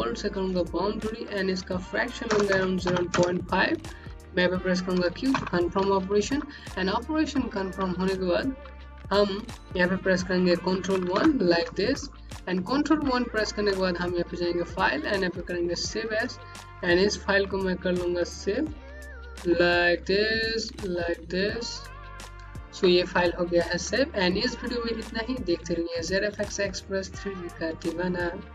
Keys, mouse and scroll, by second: 2.2 KP_0, 2.4 KP_Decimal, 2.7 KP_5, 3.0 KP_Enter, 4.1 click, 5.2 q, 6.1 scroll up 1, 6.3 alt+click, 7.6 scroll down 1, 7.9 click, 10.9 ctrl+1, 11.9 click, 14.4 click, 19.0 KP_0, 19.4 click, 21.4 scroll down 1, 21.9 click.